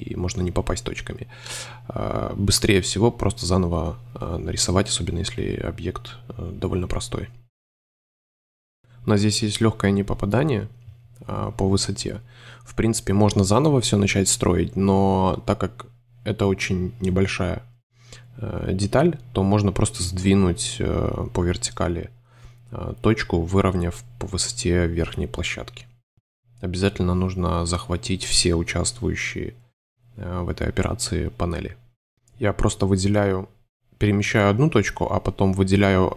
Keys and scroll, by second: 0.5 c, 1.5 c, 3.5 BackSpace, 4.0 super+a, 4.8 shift+Tab, 5.7 shift+c, 5.9 space, 13.1 a, 13.9 space, 14.5 super+space, 15.0 super+a, 15.5 shift+a, 16.9 super+d, 18.0 super+space, 20.7 a, 21.8 super+d, 24.4 shift+space, 25.0 super+space, 25.7 shift+super+d, 26.3 super+y, 27.7 super+y, 27.9 super+space, 31.7 a, 32.7 c, 33.0 super+x, 33.2 super+a, 33.8 shift+a, 35.7 shift+super+d.